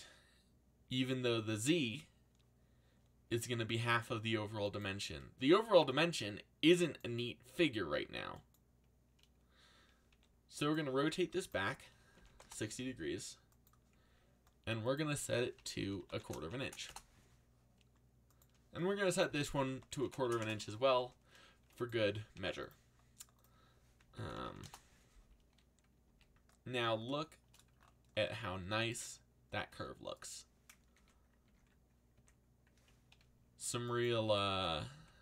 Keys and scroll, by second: 3.4 g, 5.4 g, 10.1 r, 12.1 6, 12.4 Return, 15.5-17.0 typing, 19.4-20.7 typing, 22.3 r, 23.9-24.9 typing, 26.0 a, 34.9 e.